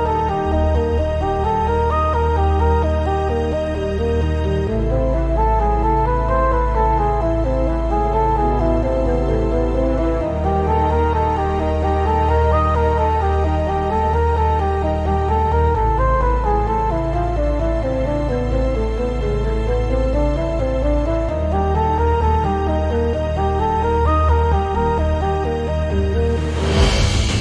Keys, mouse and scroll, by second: 0.6 click, 0.7 g, 1.7 click, 1.8 g, 2.4 click, 5.5-5.9 scroll down 2, 5.9-8.9 shift+middle drag, 8.0-8.7 scroll up 2, 8.7 scroll up 1, 8.9 click, 9.6 x, 10.1 click, 10.2 g, 10.9 click, 11.0 g, 11.8 click, 12.4 click, 12.6 x, 13.2 click, 13.3 g, 14.3 click, 14.4 g, 15.3 click, 15.4 g, 16.3 click, 16.4-22.2 typing, 17.1 click, 18.0 click, 18.6 click, 19.5 click, 20.2 click, 21.2 click, 22.1 click, 22.8 right click, 23.2 click, 23.3 g, 24.1 click, 24.2 g, 24.7 click, 24.9 scroll down 1, 25.1-27.0 shift+middle drag, 25.7-26.3 scroll down 1, 27.0 click, 27.1 x.